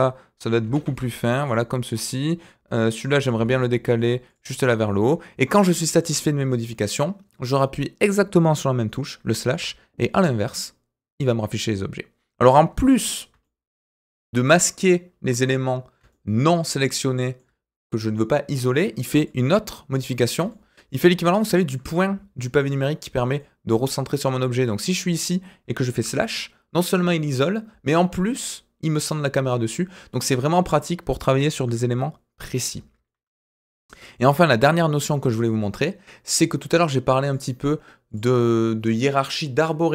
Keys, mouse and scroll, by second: 0.6 s, 1.8 click, 3.1 g, 4.5 click, 4.8-6.0 middle drag, 13.0 scroll down 2, 13.4-14.0 shift+middle drag, 14.1 scroll up 2, 14.6-15.2 shift+middle drag, 15.3-15.9 scroll up 2, 16.1-17.3 shift+middle drag, 19.2-19.9 drag, 20.2 scroll down 2, 20.5 shift+middle click, 21.7 KP_Decimal, 22.7-23.3 scroll down 4, 23.3-24.6 shift+middle drag, 29.1-29.6 scroll down 4, 29.6-30.4 middle drag, 30.4-31.6 scroll up 4, 33.4 click, 33.8-34.3 shift+middle drag, 34.4-34.7 scroll up 2, 34.8-35.2 shift+middle drag, 36.2 click, 37.2 click, 38.1 click.